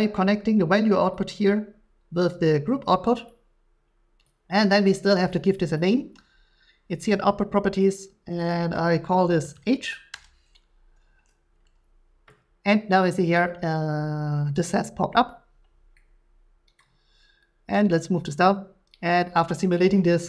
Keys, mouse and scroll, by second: 3.3 click, 5.3 click, 7.7 click, 7.8 click, 8.5 click, 9.5-9.8 typing, 10.1 Return, 13.9 typing, 15.3-16.8 drag, 16.8-19.9 middle drag, 19.9 click.